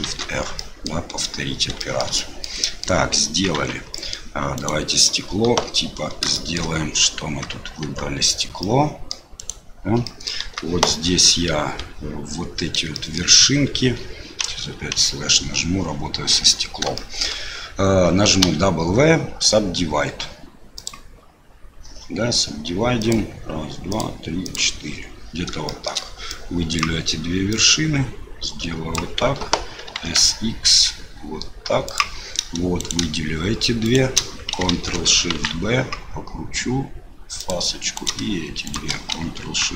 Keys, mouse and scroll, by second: 0.0 shift+r, 0.6 middle click, 1.8 shift+middle click, 2.2 middle click, 2.6 middle click, 3.5 Tab, 3.9 middle click, 4.5 click, 5.4 KP_7, 6.3 shift+middle click, 7.8 Tab, 8.6 middle click, 9.4 click, 10.0 middle click, 10.2 click, 10.4 KP_7, 11.5 1, 12.9 shift+click, 14.4 KP_Divide, 14.9 KP_Divide, 16.9 shift+click, 18.4 w, 23.9 click, 25.7 shift+click, 26.3 click, 27.5-28.9 drag, 29.9 s, 32.8 click, 33.8 shift+click, 35.3 ctrl+shift+b, 37.9 click, 38.6 shift+click, 39.6 ctrl+shift+b.